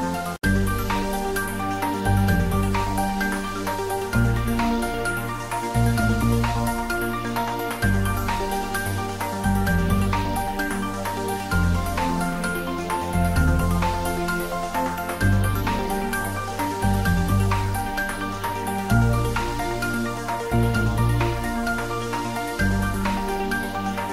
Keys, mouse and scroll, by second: 0.2 3, 0.6 click, 0.9 ctrl+s, 1.4 click, 2.2 drag, 3.7 Return, 4.6 s, 6.6 ctrl+s, 7.2-8.1 middle click, 8.2-8.6 shift+middle click, 8.8 click, 10.4-11.5 scroll down 2, 12.4 click, 13.6 s, 14.1 click, 14.8 ctrl+s, 15.3-15.6 ctrl+middle drag, 17.7 click, 19.0 r, 19.2 y, 19.8 x, 20.6 Return, 20.9 shift+z, 22.6 shift+z, 23.2 click, 23.7 ctrl+middle click, 23.9 shift+z.